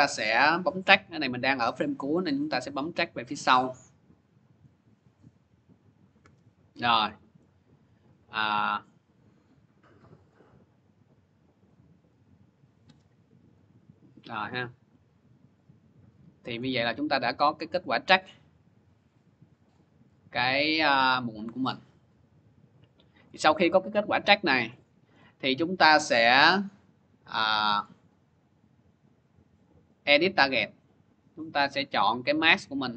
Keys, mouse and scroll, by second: 0.0 click, 2.7 click, 4.8-7.0 drag, 7.3 scroll, 10.1 click, 12.1 click, 14.0 scroll, 16.4 click, 16.4 middle click, 16.7 click, 16.7 middle click, 17.2-18.0 scroll, 19.5 click, 20.3-21.0 scroll, 23.2 click, 23.2 middle click, 24.1 middle click, 25.0 middle click, 28.4 scroll, 30.0 scroll, 30.0 click, 31.9 click, 32.5 click.